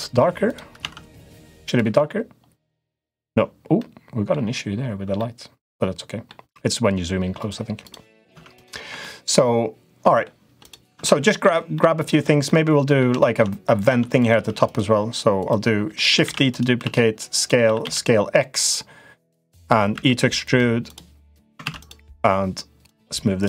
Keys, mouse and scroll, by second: 0.5 Tab, 1.5 click, 1.6 Tab, 3.5 middle click, 4.9-6.0 middle drag, 7.6 click, 8.0 Tab, 8.3 click, 8.6 Tab, 8.7-10.0 middle drag, 10.6 Tab, 10.8 middle click, 11.5 middle click, 12.2 middle click, 12.9 shift+middle click, 13.6 click, 13.7 Tab, 14.0 click, 14.2 Tab, 15.2 click, 15.7 middle click, 16.0 shift+d, 16.6 s, 17.4 s, 19.7 e, 20.6 click, 21.4 ctrl+z, 21.6 click, 22.6 click.